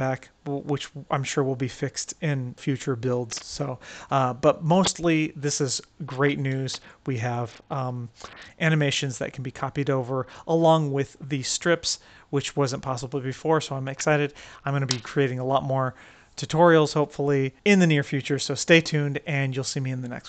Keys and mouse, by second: 1.1 click, 4.2-4.8 right drag, 6.5 middle click, 7.2 middle click, 7.9-9.2 right drag, 9.8-10.8 right drag, 11.1 right click.